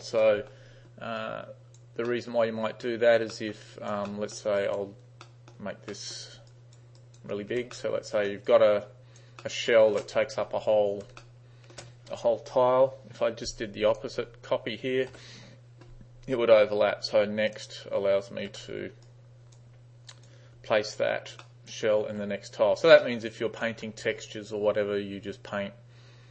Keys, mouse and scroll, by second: 0.3 middle click, 1.3-1.9 right drag, 2.1 middle click, 3.4 middle click, 3.7 right click, 4.1 middle drag, 4.7 right click, 5.3 middle click, 6.0 middle click, 6.5 space, 6.6 right click, 7.1 right click, 7.8-8.3 middle drag, 7.8 space, 8.5 right click, 9.5-10.0 middle drag, 11.1 space, 11.3-11.8 middle drag, 14.0 click, 15.1 s, 17.5 click, 18.5 s, 19.1 right click, 20.2 right click, 21.5-22.1 alt+middle drag, 23.1 alt+middle click, 23.3 alt+right click.